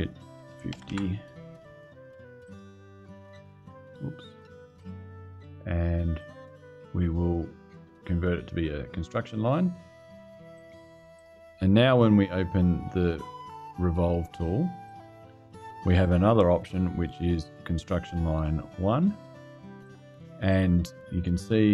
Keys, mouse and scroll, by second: 0.2 KP_5, 0.4 KP_0, 0.6 KP_Enter, 2.1 click, 4.3 click, 5.9 click, 8.3 click, 10.2 click, 10.9 click, 14.6 click, 16.3 click, 19.5 click.